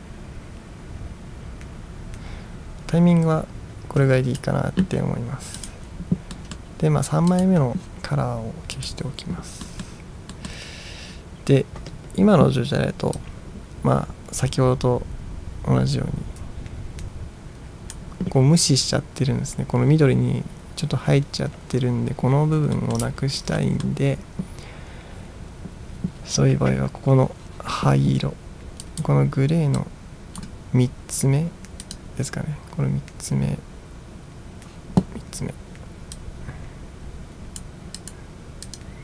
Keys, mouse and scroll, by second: 5.6 click, 6.5 middle drag, 7.4 click, 8.8 click, 9.7 middle drag, 10.4 middle click, 13.2-18.0 drag, 22.8 middle drag, 23.2-24.0 middle drag, 23.2-23.6 scroll up 1, 28.9 click, 29.9-30.5 drag, 31.9 click, 36.2-37.7 drag, 38.1 click, 38.8 click.